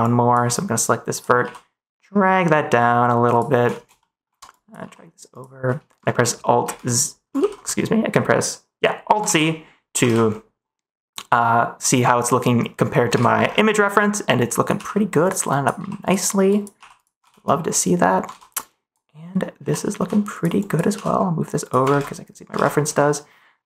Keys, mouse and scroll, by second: 0.1 ctrl+s, 1.4 g, 3.2 click, 3.9 middle click, 4.4 click, 4.8 g, 5.2 click, 6.6 alt+a, 7.3 ctrl+z, 9.2 alt+z, 10.0 ctrl+s, 13.1 ctrl+s, 14.3 click, 14.7 g, 15.5 click, 15.7 g, 16.5 click, 16.7 g, 16.9 click, 17.2 ctrl+s, 17.4 click, 18.5 click, 19.5 g, 19.9 x, 20.2 click, 20.6 click, 20.8 g, 21.5 click, 21.8 ctrl+s.